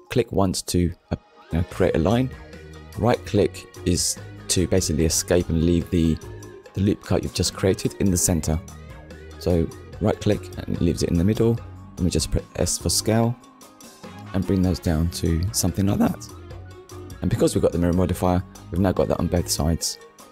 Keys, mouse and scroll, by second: 0.6 click, 2.0 ctrl+r, 2.6 click, 3.3 right click, 7.9 click, 8.9 ctrl+r, 9.7 click, 14.7 click, 15.5 Tab, 15.9-16.4 scroll down 2, 16.8 shift+middle click, 17.6 z, 18.1 click, 18.5 middle click.